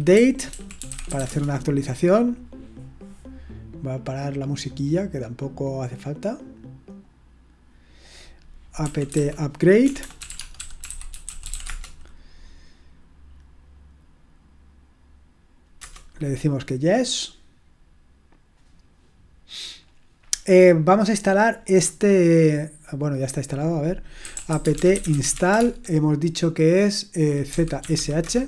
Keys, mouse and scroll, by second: 0.0-1.6 typing, 6.9 click, 8.0 click, 8.6-12.0 typing, 23.1 click, 24.0-26.0 typing, 27.2-28.4 typing.